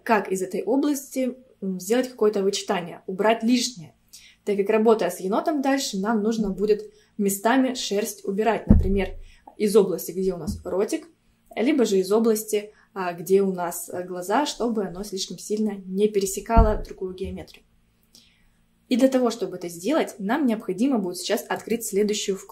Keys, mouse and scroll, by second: 21.6-22.5 drag.